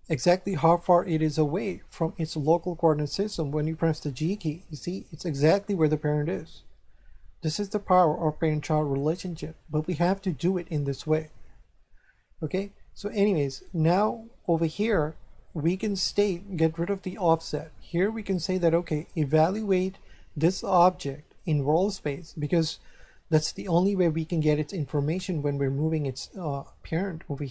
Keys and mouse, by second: 3.9 g, 4.8 click, 6.4 g, 7.5 click, 12.4 shift+middle click, 16.8 click, 26.5 shift+middle click.